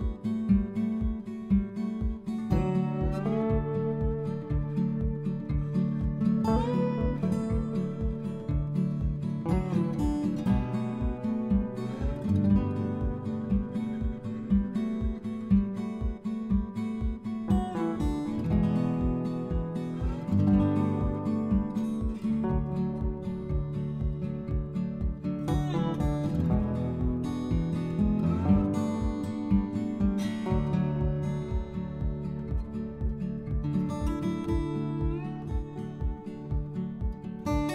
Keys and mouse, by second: 0.1 click, 0.5 middle click, 1.1 shift+Tab, 3.1 a, 3.7 middle click, 5.2 s, 6.3 x, 6.9 click, 7.4 z, 7.6 click, 8.0 click, 8.5 Tab, 8.8 click, 9.0 click, 9.4 middle click, 10.4 click, 10.8 Tab, 11.3 a, 11.7 s, 12.2 y, 12.8 x, 13.6 click, 13.9 z, 14.3 click, 14.7 Tab, 15.0 click, 15.9 click, 16.6 click, 17.2 click, 18.7 shift+Tab, 20.4 a, 21.6 s, 22.2 x, 23.3 click, 23.6 z, 24.0 middle click, 24.9 click, 25.4 middle click, 25.9 middle click, 26.4 a, 27.6 x, 28.2 click, 28.8 s, 29.3 x, 31.1 click, 31.3 middle click, 31.8 click, 33.5 s, 33.9 x, 36.1 click, 36.4 click, 36.7 middle click, 37.6 click.